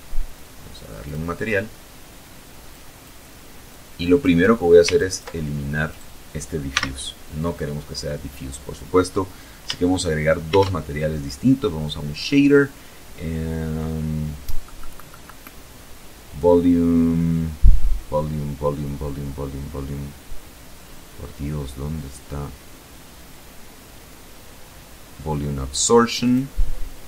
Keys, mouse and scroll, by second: 0.9 click, 1.9-2.6 drag, 3.1 ctrl+click, 4.1 right click, 4.9 x, 8.7 shift+a, 24.4 click, 25.8 click, 26.8 shift+a.